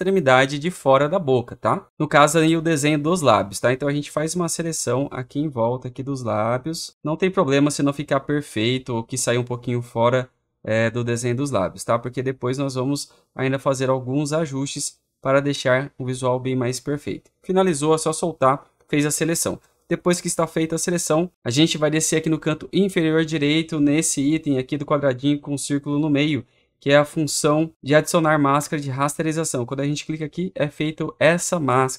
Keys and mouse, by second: 17.3 click, 29.9 click.